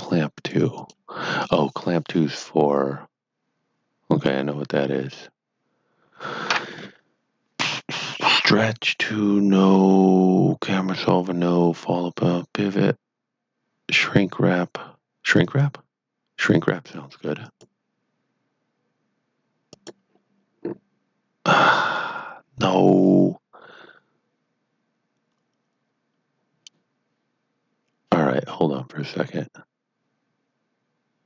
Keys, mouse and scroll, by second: 15.4 click.